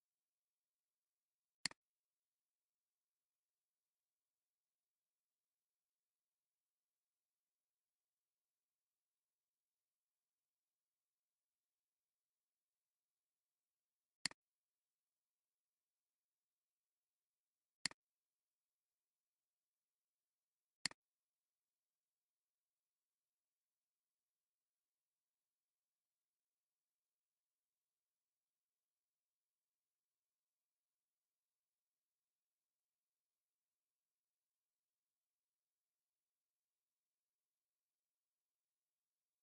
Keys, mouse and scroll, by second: 0.1 scroll up 1, 2.6-3.9 typing, 4.8 Return, 7.9 scroll down 1, 11.0 scroll down 1, 22.5-24.8 typing, 26.1 Return, 32.5 scroll down 1, 33.6 scroll, 33.7 scroll up 1, 35.8 scroll down 1.